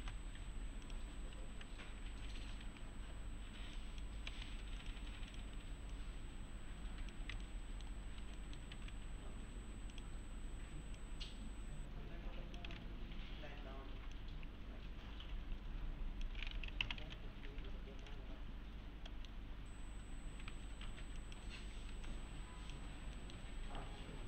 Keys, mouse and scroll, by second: 0.0 ctrl+v, 0.9 click, 2.2-3.1 typing, 2.8-3.3 scroll down 1, 3.8 click, 4.3 alt+x, 4.8 click, 7.4-8.1 alt+middle click, 8.0 scroll up 1, 8.4 middle click, 8.7 ctrl+z, 11.3-12.9 click, 12.7 alt+q, 14.2-16.3 click, 16.6-17.5 typing, 17.2-18.0 scroll down 1, 18.0 click, 18.8 scroll up 1, 19.1 middle click, 19.6-20.5 scroll up 1, 20.5 alt+`, 20.8 1, 21.2 click, 21.9 s, 22.1-23.0 click, 23.2 middle click, 23.8 1.